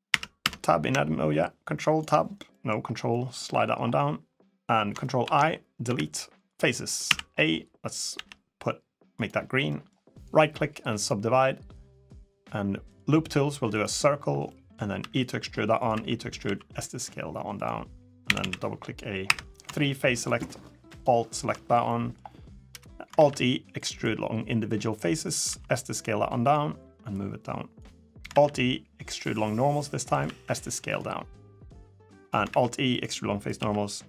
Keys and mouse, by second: 0.2 Tab, 1.2 ctrl+click, 2.3 middle drag, 2.9 drag, 5.0 ctrl+i, 5.6 Delete, 6.8 a, 7.9 g, 9.5 middle click, 9.9-10.8 right drag, 12.6 click, 14.2 middle click, 14.8 e, 15.7 e, 16.2 s, 18.0 a, 18.2 a, 19.0 3, 20.0 alt+click, 20.7 alt+click, 21.3 middle click, 21.6 middle click, 22.9 alt+e, 25.2 s, 26.9 click, 28.1 alt+e, 30.0 s, 31.4 click, 32.2 alt+e, 33.3 s.